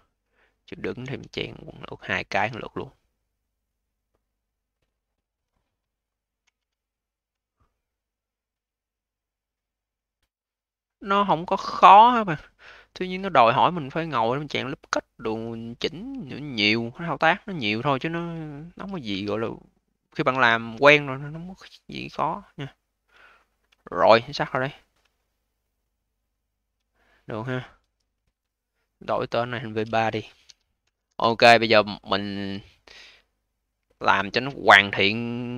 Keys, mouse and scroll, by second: 0.2 alt+middle click, 0.9 ctrl+z, 1.6 click, 2.2 a, 6.3 e, 7.1 click, 12.2-12.7 scroll up 3, 12.7-13.1 alt+middle drag, 13.1-14.1 alt+drag, 14.1-14.8 scroll up 1, 14.8-15.6 alt+middle drag, 15.6-16.1 scroll down 4, 16.1-16.6 alt+middle drag, 16.6-19.0 alt+drag, 19.0 q, 20.2 v, 20.7-21.2 scroll up 2, 21.2-21.8 scroll up 2, 21.8-22.1 scroll up 5, 22.1-23.2 alt+drag, 23.2-23.7 scroll down 6, 23.7-24.5 alt+middle drag, 24.5-25.0 scroll down 4, 25.0 alt+middle click, 25.5-26.9 alt+drag, 26.9-28.6 scroll up 3, 28.6 scroll down 3, 29.4 click, 29.6-31.9 drag, 31.9-32.6 scroll up 1, 32.6 alt+middle click, 33.0-34.3 alt+drag, 34.3 alt+middle click, 34.7 alt+click.